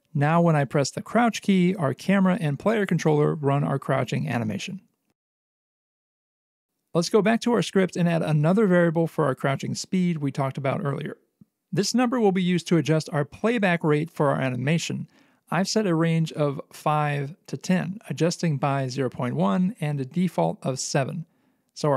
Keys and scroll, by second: 2.9 c, 6.1 c.